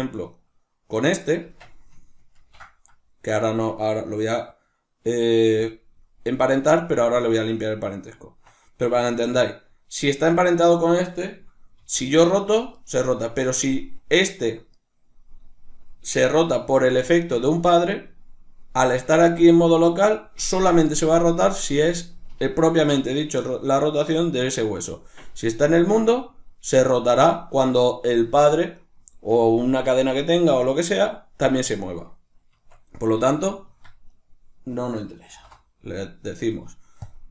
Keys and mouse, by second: 0.0 shift+right click, 1.1 Tab, 8.9-11.4 right drag, 11.4 r, 12.9 right click, 13.2 r, 14.5 right click, 18.6 right click, 25.4-28.4 drag, 28.4 right drag, 32.2 Tab, 33.8 right click, 34.9 alt+p.